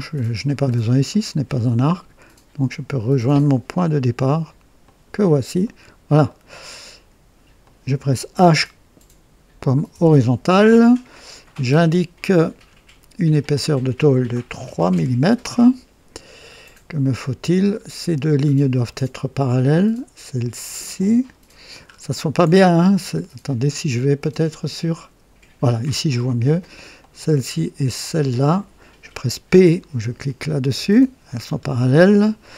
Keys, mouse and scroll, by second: 0.1 scroll up 2, 0.6 scroll up 2, 1.0 right click, 4.8 click, 5.6 right click, 6.2 right click, 7.5 click, 9.9 h, 11.4 click, 13.3 click, 14.6 KP_3, 14.9 KP_Enter, 16.4 scroll up 1, 17.0 right click, 17.7 scroll down 1, 18.3 scroll down 1, 18.8 right click, 20.9 click, 21.8 scroll up 1, 24.7 click, 26.9 click, 27.9 click, 28.1 typing, 30.7 typing, 31.4-31.7 scroll down 1, 31.9 right click.